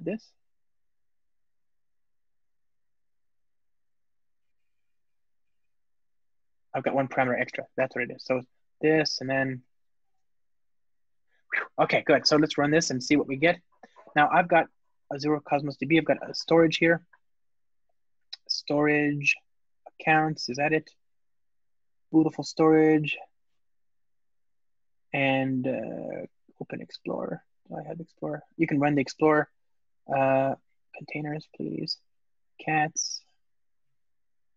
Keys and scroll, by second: 3.6 alt+shift+Right, 5.4 alt+shift+Left, 10.9 alt+super+l, 13.3 ctrl+r.